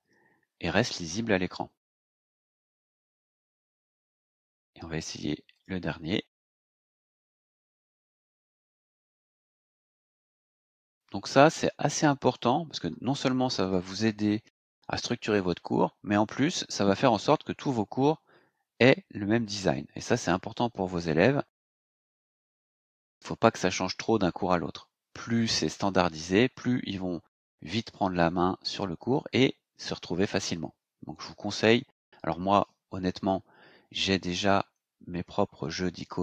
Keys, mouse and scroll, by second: 2.7 click, 4.2-4.6 scroll down 2, 5.5 click, 6.9 click, 10.2 click, 11.9 click.